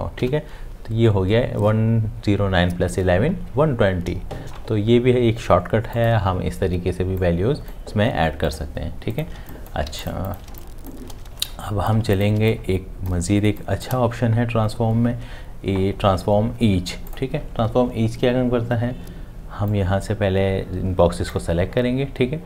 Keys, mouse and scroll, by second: 0.1 Tab, 9.3 space, 11.7 click, 12.0 space, 12.9 click.